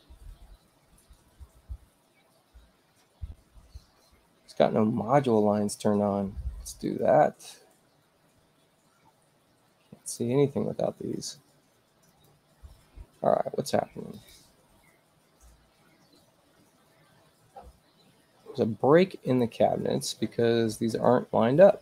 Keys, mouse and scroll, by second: 6.8 click, 9.0-9.4 scroll down 2, 10.0 click, 12.1 click, 14.1 click, 19.3 click.